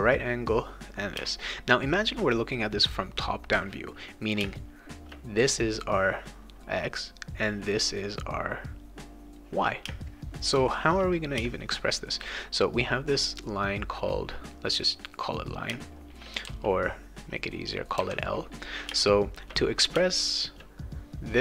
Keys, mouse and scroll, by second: 0.5 click, 1.2 space, 1.4 click, 4.7 click, 6.3 click, 6.6 click, 7.5 click, 8.5 click, 9.0 click, 9.9 space, 10.1 click, 11.8 click, 13.0 click, 13.9 click, 14.4 click, 14.7 click, 14.9 click, 15.7 space, 15.9 click, 16.4 e, 16.9-17.9 drag, 18.9 space, 19.1 click, 19.9 space, 20.2 click, 21.2-21.4 drag.